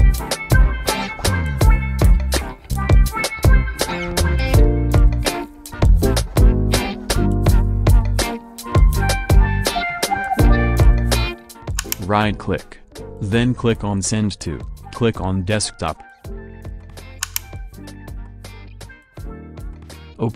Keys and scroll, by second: 6.3 Down, 9.8 Up.